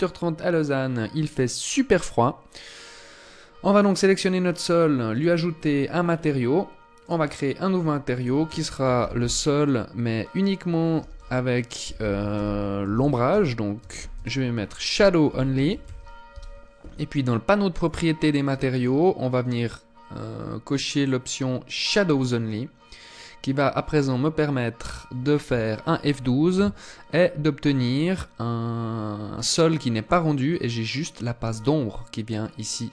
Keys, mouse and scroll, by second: 3.1 right click, 4.5 click, 5.3-6.0 scroll up 6, 6.0 scroll up 1, 6.4 click, 7.6 click, 17.3 click, 21.2 click, 22.5 click.